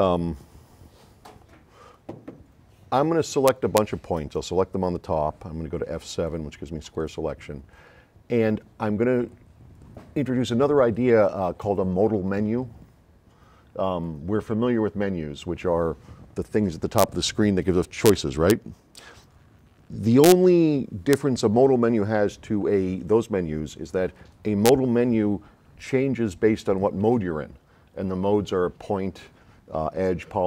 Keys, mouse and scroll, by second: 5.9 F7, 6.3-7.1 drag.